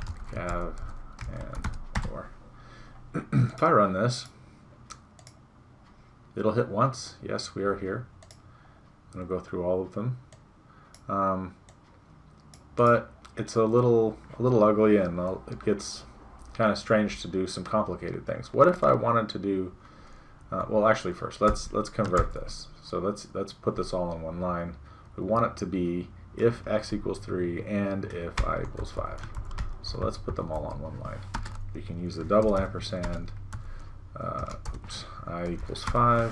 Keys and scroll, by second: 2.0 Return, 21.5 Home, 22.3 shift+Return, 28.4 Delete, 28.9 Down, 29.3 shift+Return, 29.6 Delete, 29.9 Up, 30.6 End, 34.5 BackSpace.